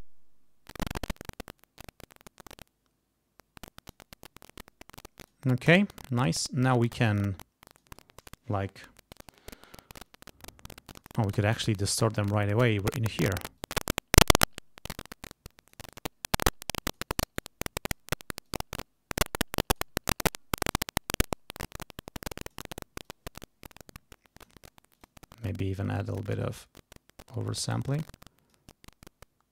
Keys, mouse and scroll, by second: 5.2 click, 5.8 right click, 7.7 click, 10.9 click, 11.7 click, 12.8 right click, 13.6-18.1 drag, 17.1 right click, 18.4-19.9 drag, 20.3 click, 21.3-22.7 drag, 23.0-24.6 drag, 24.9 click, 25.4-27.9 drag, 28.0 click.